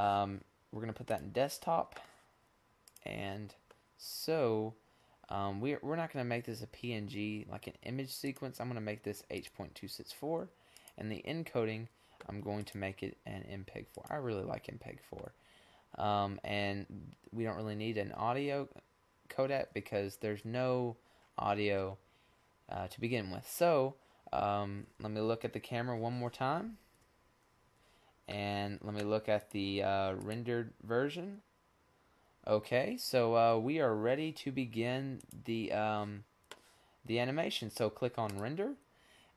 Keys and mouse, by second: 0.0 click, 0.6-1.2 drag, 1.2-3.3 middle drag, 4.9-7.1 drag, 7.4-11.6 drag, 17.2-20.7 middle drag, 21.8 KP_0, 23.6 KP_0, 26.2-26.6 drag, 28.3-29.7 middle drag, 31.8 click, 32.8 click, 33.7 click, 34.6 click, 36.8-38.9 middle drag.